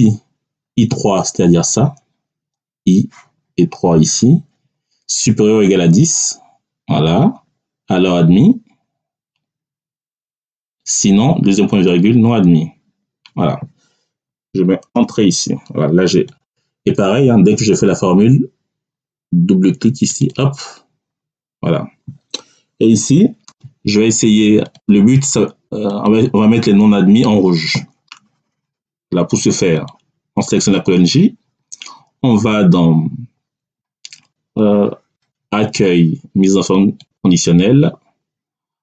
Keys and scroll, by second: 14.8 Return.